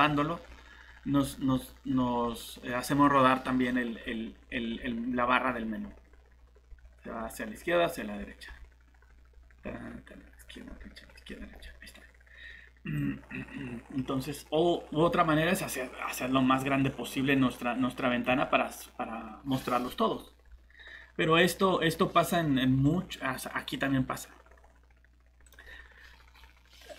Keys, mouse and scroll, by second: 0.8-1.5 scroll up 1, 1.5-2.1 scroll down 1, 2.1-3.1 scroll up 1, 3.6-4.3 scroll down 1, 4.3-5.1 scroll up 1, 5.1-6.0 scroll down 1, 6.0-6.7 scroll up 1, 6.7-7.5 scroll down 1, 7.5-8.2 scroll up 1, 8.2 scroll down 1, 9.0-9.8 scroll up 1, 9.8-10.3 scroll down 1, 10.3-10.8 scroll up 1, 10.8-11.1 scroll down 1, 11.3-13.0 scroll up 1, 13.0 click.